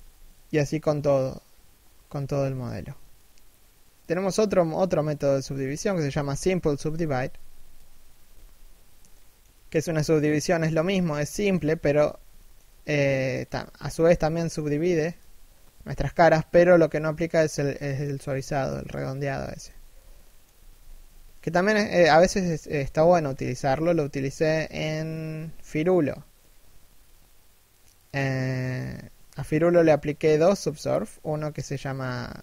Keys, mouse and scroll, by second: 0.0 shift+middle click, 7.9 z, 8.7 shift+middle click, 10.7 shift+middle click, 11.1 scroll up 1, 11.3 z, 12.0 shift+middle click, 12.7 middle click, 13.1 z, 13.3 middle click, 14.1 1, 14.8 z, 17.1 scroll down 1, 17.4 shift+middle click, 19.1 z, 19.8 shift+middle click, 20.1 z, 21.8 shift+middle click, 22.3 scroll down 1, 22.6 shift+middle click, 22.9-23.4 scroll up 1, 23.4 shift+middle click.